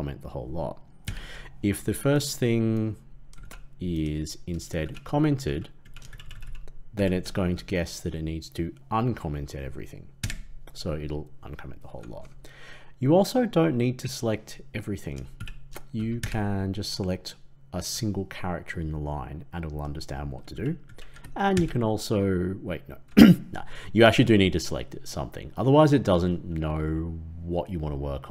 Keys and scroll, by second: 1.0 ctrl+/, 3.3 ctrl+x, 4.8 ctrl+v, 10.1 ctrl+/, 16.1 ctrl+/, 21.5 ctrl+/.